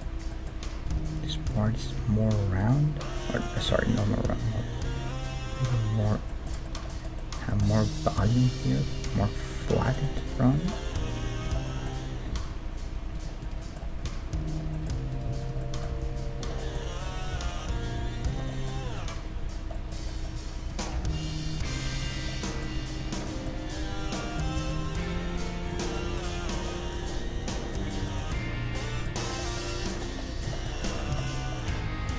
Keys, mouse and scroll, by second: 2.0 g, 3.3-5.0 middle drag, 3.7 g, 6.3-9.0 middle drag, 7.7 g, 9.2 g, 11.1 g, 12.4 g, 13.4 right click, 14.0 g, 15.9 g, 17.3 g, 20.9 g, 21.7 middle click, 21.7 right click, 22.5-32.1 middle drag, 23.0-25.7 right drag, 24.5 g, 29.8-31.5 right drag, 31.1 a.